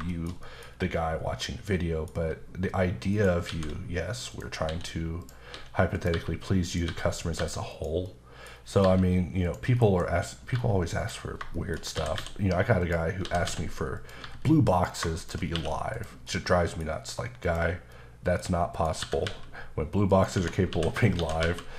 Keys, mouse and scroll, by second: 0.1 middle click, 0.7-1.4 scroll up 3, 3.1 shift+right click, 3.5 shift+a, 4.3 click, 4.7-7.4 typing, 5.2 click, 5.9 click, 6.6 click, 7.2 click, 7.7 click, 8.0 middle click, 8.5-8.8 scroll up 2, 8.8 g, 9.4 click, 9.7 middle click, 9.8 ctrl+shift+b, 10.5-11.0 scroll up 1, 11.0 click, 11.3 scroll down 1, 11.5 shift+middle click, 11.9 typing, 12.8 click, 13.2-14.2 typing, 14.7 click, 15.2 shift+click, 15.6 q, 15.9 click, 16.2 middle click, 17.1-17.4 scroll down 1, 17.6 click, 18.8 click, 19.0 typing, 20.1 click, 20.4 Tab, 20.7 a, 21.1 shift+d.